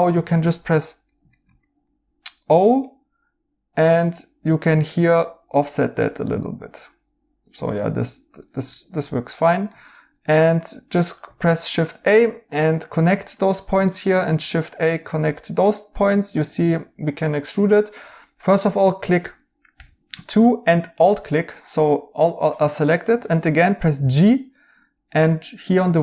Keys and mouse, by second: 2.5 o, 8.6 right click, 11.3 a, 13.1 right click, 14.2 a, 15.6 right click, 17.7 right click, 19.7 2, 21.3 right click, 22.7 right click, 23.9 g.